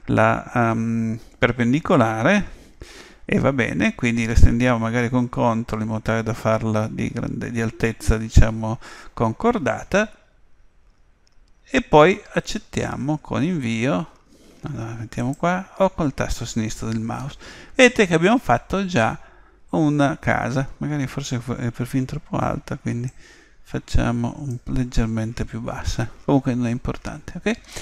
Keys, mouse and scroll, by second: 17.3-19.4 middle drag, 23.1 click, 26.0-27.8 middle drag.